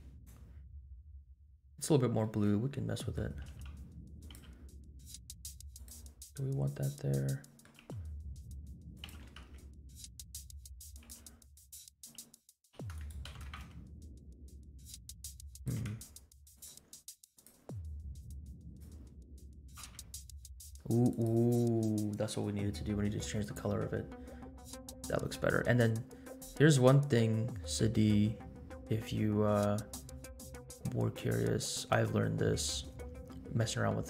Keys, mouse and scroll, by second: 0.0-0.7 drag, 0.0 scroll down 2, 0.1 KP_Decimal, 0.7 scroll up 1, 1.3 scroll up 1, 1.9 scroll down 1, 2.2 middle click, 3.5 r, 4.3 g, 6.1-6.4 scroll down 3, 6.8 scroll down 1, 7.1-7.6 middle drag, 7.8 g, 9.1 g, 11.1 s, 12.9 g, 13.3 g, 15.7 r, 17.3 click, 19.4 g, 23.4 click, 23.8-24.3 scroll up 2, 31.3-32.6 scroll up 4.